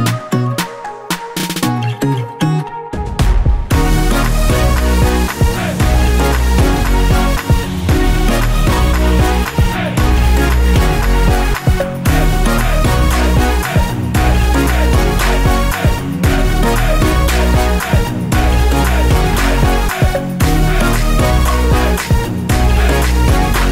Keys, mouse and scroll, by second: 1.8 click, 1.9 KP_7, 2.6 g, 4.0 click, 4.2 r, 5.0 click, 5.3-7.4 middle drag, 5.6 scroll down 1, 6.9-7.4 scroll down 1, 7.4 click, 7.9-11.3 middle drag, 11.3 shift+right click, 11.4-12.7 middle drag, 12.7 shift+right click, 13.0-14.8 middle drag, 14.0 KP_7, 14.8 shift+right click, 15.1 KP_3, 16.1 shift+right click, 16.8-17.2 scroll up 1, 17.2 shift+a, 19.0 r, 21.3 KP_Enter, 21.6 s, 22.8 click, 23.2 KP_7, 23.6-23.7 scroll down 1.